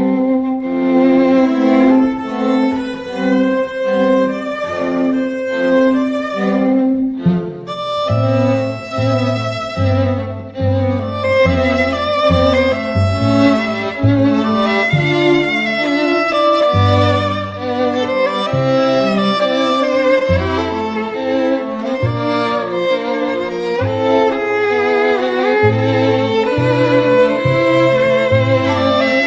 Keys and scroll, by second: 26.6 t.